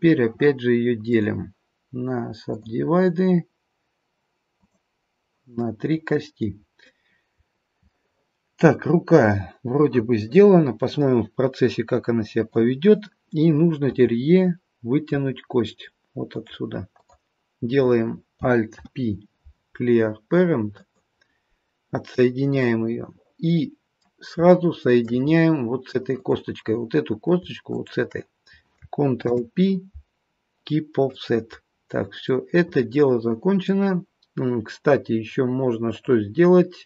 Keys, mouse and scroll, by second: 1.1 click, 4.5 click, 5.6 middle click, 6.6-7.9 scroll down 5, 7.9 middle click, 12.3 click, 13.9 e, 16.9 click, 18.7 alt+p, 22.6 middle click, 22.6-24.3 scroll up 1, 24.5 shift+middle click, 25.2-25.6 scroll up 1, 26.1 click, 27.7 shift+click, 29.3 ctrl+p, 31.7-32.3 scroll down 3, 32.3 middle click, 35.9 click.